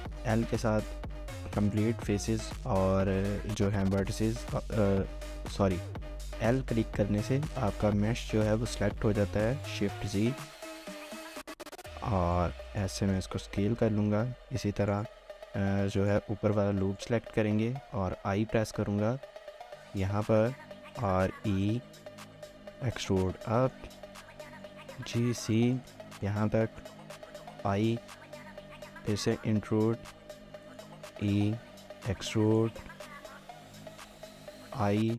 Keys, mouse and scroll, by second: 0.1 typing, 8.9-9.6 typing, 13.0 shift+middle click, 14.0 typing, 15.6 typing, 16.0 alt+click, 19.8-21.1 typing, 20.3 scroll down 1, 23.5 shift+middle click, 23.9 shift+scroll up 1, 24.7-25.5 typing, 26.1 shift+middle click, 26.6 shift+middle click, 30.4-31.6 typing, 32.8 shift+middle click.